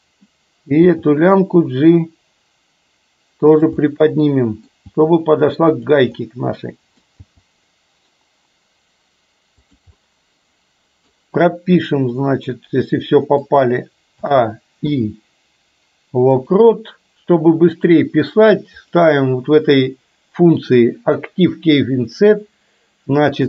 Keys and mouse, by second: 1.1 g, 3.8-4.8 middle drag, 4.9 g, 6.2 middle click, 7.3 g, 10.1-11.1 middle drag, 12.2-13.4 middle drag, 14.3 a, 14.8 i, 17.9-23.4 drag.